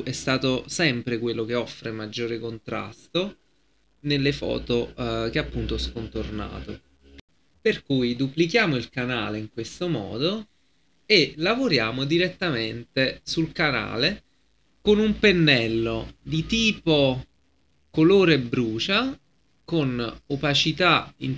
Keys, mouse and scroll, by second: 7.2 F10, 8.2-21.3 drag.